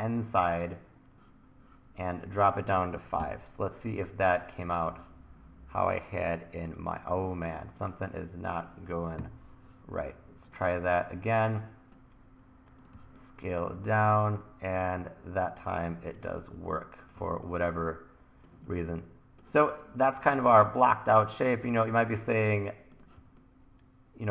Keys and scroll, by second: 3.1 5, 3.2 Return, 9.2 Delete, 13.0 t, 14.3 t, 17.2 t, 18.3 t, 20.4 t, 21.7 super+z, 23.2 t.